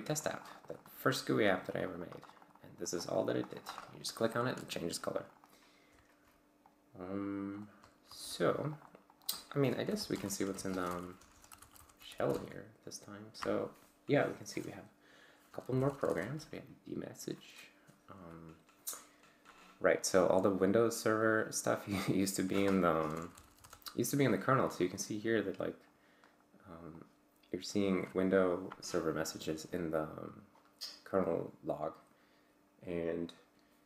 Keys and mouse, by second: 1.7-3.9 drag, 4.3 click, 5.2 click, 6.7 click, 8.1 ctrl+alt+g, 8.7 click, 9.1 click, 9.7-12.6 typing, 15.4-16.6 typing, 22.9-24.1 typing, 24.6-26.0 drag, 27.0 click.